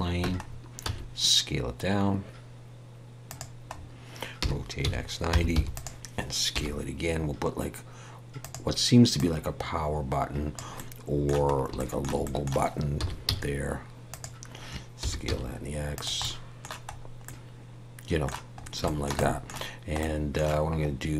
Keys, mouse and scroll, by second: 0.2 Tab, 0.4-0.9 scroll down 3, 0.8 s, 3.7 scroll up 1, 4.4-4.8 scroll up 1, 4.4 r, 6.5 s, 9.2 click, 10.7 middle click, 11.5 scroll up 2, 11.8 shift+middle click, 12.2 middle click, 13.0 s, 16.2 middle click, 16.9-17.2 scroll up 1, 17.2 middle click, 18.6 scroll up 2, 18.8 shift+middle click, 19.2 middle click, 20.0 middle click.